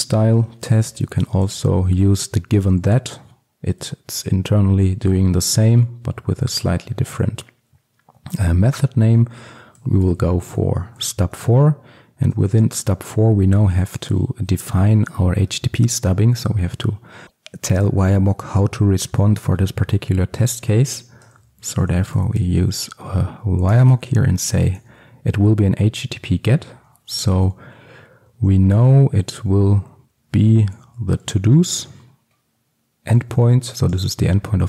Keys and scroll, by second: 11.5 Return, 23.8 Return.